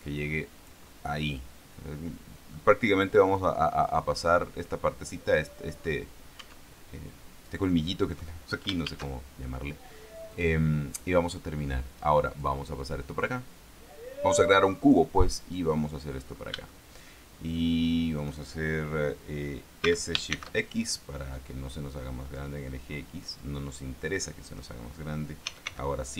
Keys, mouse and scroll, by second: 1.2-3.1 middle drag, 3.7 click, 6.7 Tab, 9.2 shift+a, 10.7 click, 11.7-12.8 scroll down 4, 12.8-15.5 drag, 15.5 middle click, 16.5-17.0 scroll up 3, 17.0-18.7 shift+middle drag, 20.2 s, 20.6 shift+x, 23.5 click, 23.9-25.1 middle drag, 25.8 s, 26.0 x.